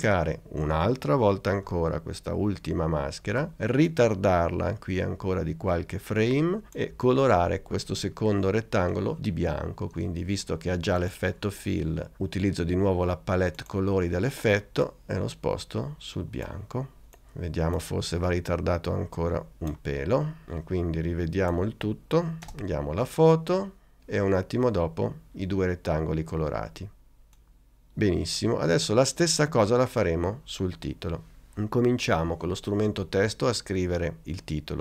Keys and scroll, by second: 3.3 super+d, 22.5 space.